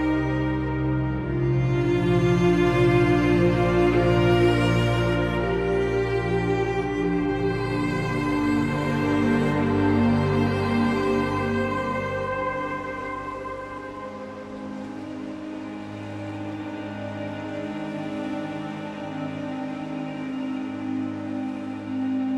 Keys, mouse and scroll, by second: 7.6 click, 11.3-13.1 middle drag, 13.1-14.8 drag, 14.9-16.4 drag, 17.5 scroll down 3, 17.7 middle click, 18.2-20.1 middle drag, 20.1-21.2 drag.